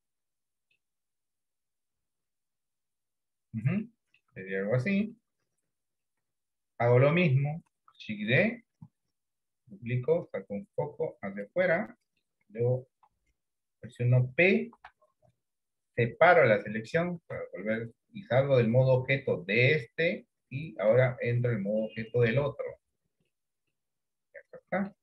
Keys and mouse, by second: 2.1 KP_1, 2.4 KP_3, 4.0 shift+middle click, 5.3 shift+middle click, 8.6 shift+d, 11.9 middle click, 13.2 KP_3, 14.8 p, 17.5 Tab, 22.2-23.4 drag, 23.8-25.0 middle drag.